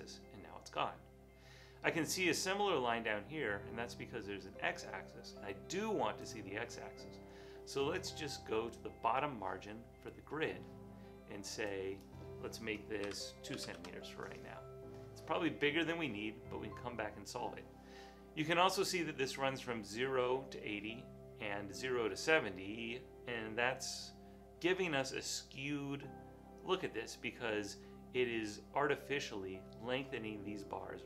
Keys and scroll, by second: 13.0-14.2 typing.